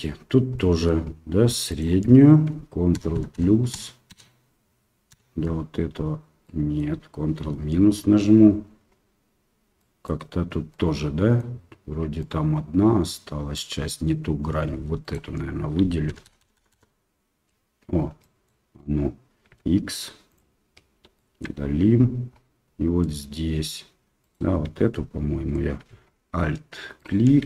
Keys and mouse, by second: 0.5 middle click, 1.7 alt+right click, 2.9 ctrl+KP_Add, 3.1 ctrl+KP_Add, 3.3 ctrl+KP_Add, 3.7 ctrl+KP_Add, 4.1 ctrl+KP_Add, 5.1 ctrl+KP_Add, 6.4 middle click, 7.4 ctrl+KP_Subtract, 9.7 middle click, 10.7 middle click, 12.1-13.5 middle drag, 15.0 alt+right click, 16.1-16.4 ctrl+KP_Add, 16.5 ctrl+KP_Add, 16.7 ctrl+KP_Add, 18.2 middle click, 19.5 x, 21.1 shift+middle click, 23.0 middle click, 24.2 right click, 26.9 alt+right click.